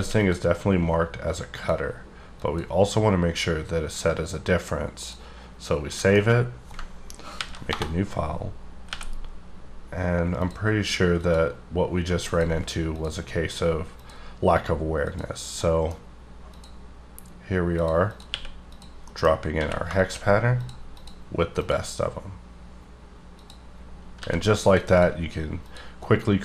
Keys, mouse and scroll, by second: 0.1 a, 0.2 click, 1.6 click, 2.4 click, 5.0 click, 5.9 middle click, 7.4 ctrl+n, 7.6 Return, 8.6-8.9 scroll up 6, 8.9 n, 10.4 click, 11.2 click, 12.3 click, 13.0 click, 14.0 click, 15.1 click, 15.6 middle click, 16.5 click, 17.8 click, 18.1 click, 18.3 q, 18.7 click, 19.1 middle click, 19.6 q, 20.0 shift+click, 21.0 click, 21.6 click, 23.4 click, 24.2 g, 24.6 click, 24.9 double click, 25.6 click.